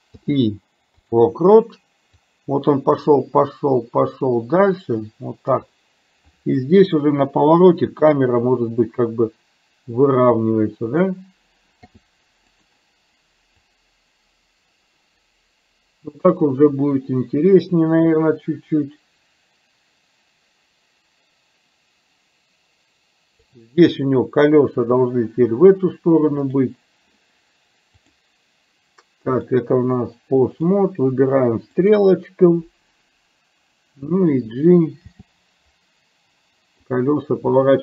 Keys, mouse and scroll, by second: 0.2 i, 2.4-5.9 drag, 8.0 r, 11.9 i, 13.7-23.6 drag, 26.5 click, 28.0 click, 29.5-30.9 drag, 31.9 click, 35.2 g.